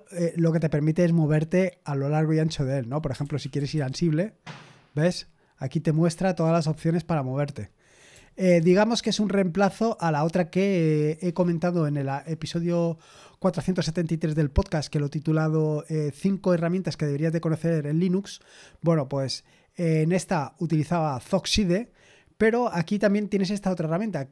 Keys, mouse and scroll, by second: 2.8-4.2 typing, 8.1-8.9 typing.